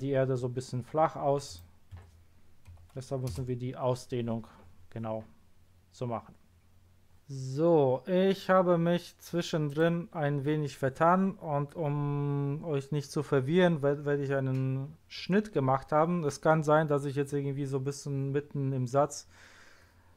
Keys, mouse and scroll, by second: 1.5 click, 1.9 1, 2.7 0, 3.3 Return, 9.7 click.